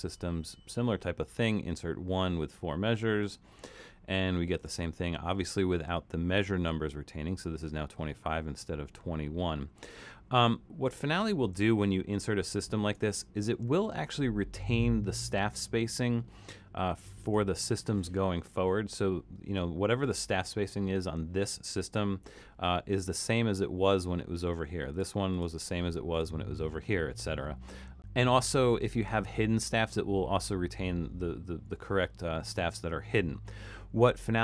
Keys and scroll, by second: 5.3 Escape, 11.8 super+-, 12.4 super+-.